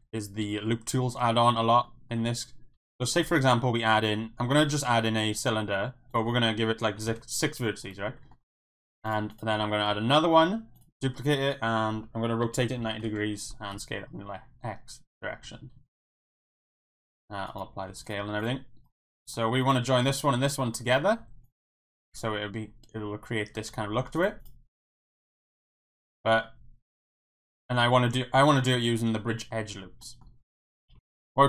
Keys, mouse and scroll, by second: 1.6 shift+middle click, 1.8 middle click, 2.7 KP_1, 3.4 shift+a, 6.1 click, 8.3 shift+middle click, 9.6 shift+d, 9.9 z, 10.7 click, 12.7-13.7 typing, 13.1 KP_Enter, 15.1 click, 15.4 g, 15.8 z, 16.1 click, 16.7 ctrl+a, 17.9 Tab, 18.4 click, 19.0 middle click, 19.6 click, 20.8 middle click, 21.2 Tab, 23.6 Tab, 24.2 click, 24.8 middle click, 25.6 KP_1, 26.4-27.9 middle drag, 28.8-29.5 middle drag, 30.0 middle drag, 30.9 KP_1, 31.0 ctrl+z, 31.0 Tab.